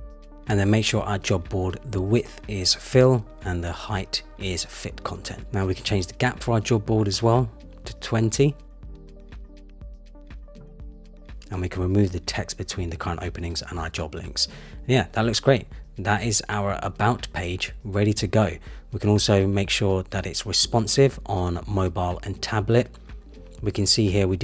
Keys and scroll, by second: 1.7 Return, 6.4 shift+Up, 11.3 super+z, 19.4 super+-.